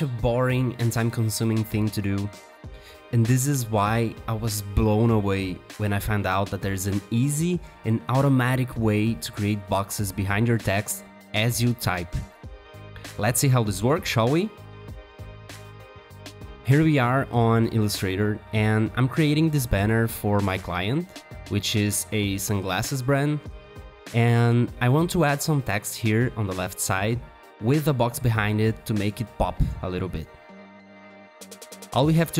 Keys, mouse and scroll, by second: 0.0 v, 2.5 alt+click, 4.2 alt+click, 5.6 Up, 7.3 Down, 10.1 double click, 15.8 alt+Tab, 23.7 t, 25.7 Caps_Lock, 26.4-29.0 typing.